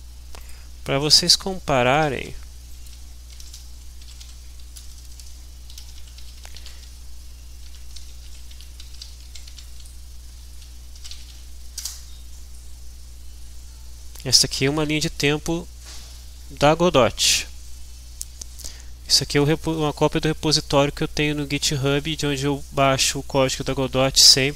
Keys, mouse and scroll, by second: 0.3 click, 2.0 ctrl+shift+t, 2.7 ctrl+shift+click, 2.9-9.2 typing, 7.6 Tab, 9.5 Tab, 10.3 Return, 10.7-11.8 typing, 22.1-22.6 scroll down 2, 22.7-23.1 scroll up 2.